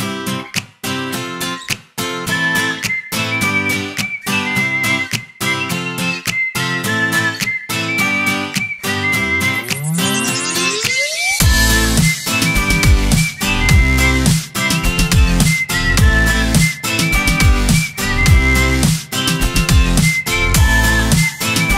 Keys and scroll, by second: 0.0-1.4 typing, 0.3 Return, 1.6 ctrl+Return, 2.4 space, 3.2 v, 4.2-6.6 typing, 4.7 ctrl+Return, 9.3 z, 9.7 space, 10.3 i, 11.0 v, 13.1 i, 13.6 space, 14.0 z, 14.2 space, 17.3 Down, 18.3 0, 18.5 7, 20.0 0, 20.2 5.